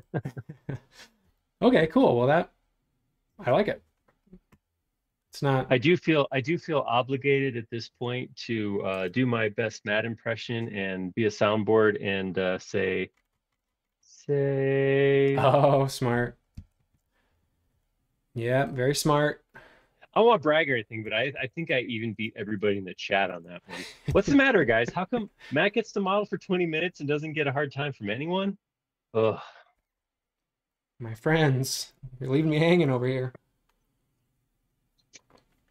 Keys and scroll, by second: 16.6 super+s, 21.0-23.1 typing, 24.1 Return.